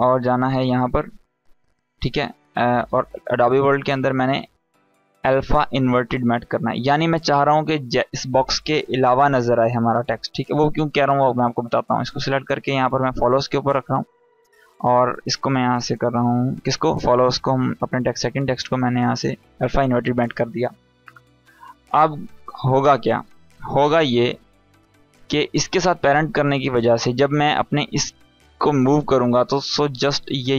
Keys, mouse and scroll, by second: 7.6 click, 11.0-13.1 drag, 19.5 click, 23.8 click, 27.8-30.2 drag.